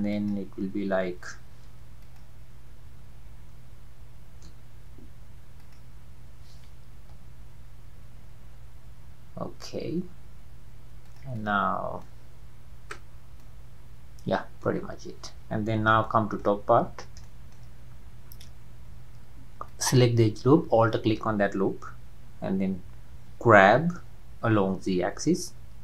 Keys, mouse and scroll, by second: 0.2 click, 1.7 Escape, 2.1 click, 4.5 Escape, 5.6-7.2 drag, 7.2 ctrl+z, 11.1 click, 12.0-13.1 middle drag, 13.1-13.4 scroll down 2, 13.4-14.8 middle drag, 14.8-15.1 scroll down 3, 16.0 shift+middle click, 16.6-17.0 scroll up 5, 17.3-18.3 shift+middle drag, 18.3 scroll up 1, 19.7 alt+click, 23.6 g.